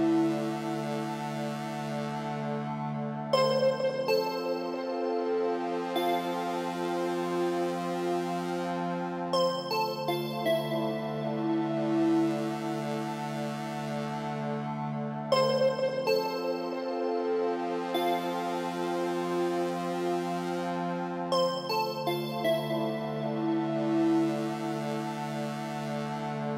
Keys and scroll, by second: 0.2 Up, 11.3 ctrl+a.